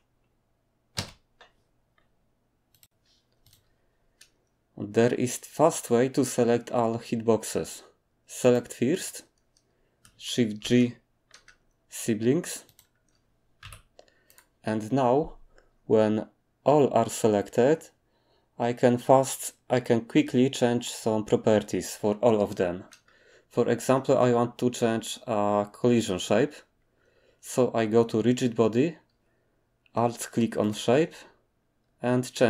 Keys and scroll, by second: 10.6 g, 13.6 g.